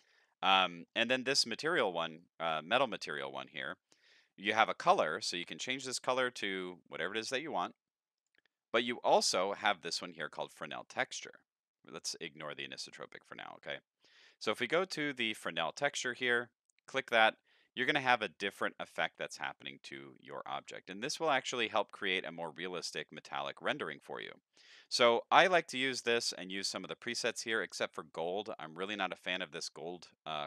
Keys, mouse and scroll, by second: 0.3 middle click, 0.7 middle click, 1.9 middle click, 3.3 middle click, 5.4 click, 6.1 click, 7.1 click, 8.2 click, 15.9 click, 20.9 middle click, 21.9-23.1 scroll down 3, 23.1 middle click, 23.1 scroll down 1, 24.5 middle click, 26.5 click, 27.7 click.